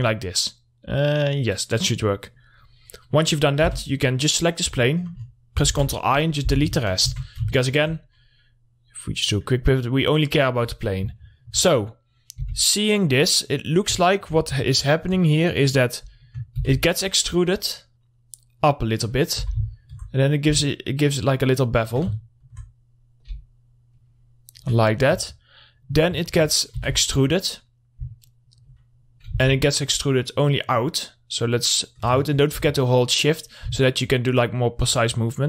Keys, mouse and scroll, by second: 2.4 click, 4.1 3, 4.4 click, 6.1 ctrl+i, 7.5 Tab, 8.0 alt+middle click, 8.4 click, 11.2-11.5 scroll up 1, 11.7 alt+middle click, 12.9 2, 13.2 click, 14.0 middle click, 14.2 scroll up 1, 14.5 alt+middle click, 17.1 shift+e, 17.3 right click, 18.2-19.8 drag, 19.8 scroll down 1, 19.8 r, 20.1 alt+middle click, 20.8-22.6 drag, 22.6 alt+middle click, 23.7-25.4 drag, 25.4 scroll up 1, 25.7 alt+middle click, 27.2 e, 27.4 right click, 28.5-29.8 shift+drag, 29.8 ctrl+z, 30.3-32.7 drag, 32.7 alt+middle click, 33.9-35.4 drag.